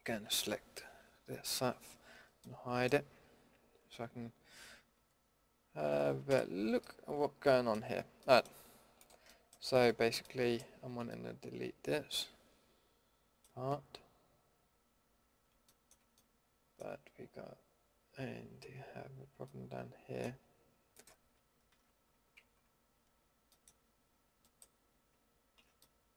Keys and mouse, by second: 0.2 l, 0.8 l, 1.5 l, 2.1 l, 3.2 l, 3.7 l, 4.4 l, 4.9 l, 6.3 h, 9.0 middle drag, 10.3 middle drag, 12.2-12.8 middle drag, 15.7-16.8 middle drag, 19.4 middle click, 19.7-20.9 middle drag, 20.9-21.7 drag, 21.7 ctrl+x, 22.4 ctrl+z, 23.5-24.4 middle drag, 25.6 ctrl+x.